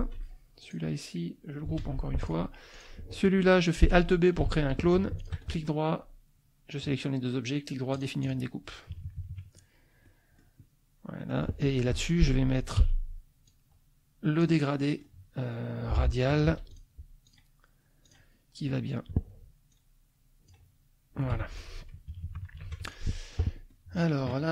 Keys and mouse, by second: 0.0 ctrl+g, 0.6 ctrl+click, 1.8 ctrl+g, 2.2 ctrl+click, 2.7 ctrl+click, 4.5 alt+d, 5.2 shift+click, 8.0 click, 8.9 KP_Subtract, 10.0 click, 11.2 click, 11.9 F2, 12.0 click, 12.8 g, 13.5-14.6 drag, 14.9 middle click, 16.4 ctrl+z, 16.7 ctrl+click, 17.3 click, 18.1 click, 19.7 click, 21.3 F1, 21.5 click, 22.1 KP_Subtract, 22.6 ctrl+s, 23.0 ctrl+click, 23.7 click.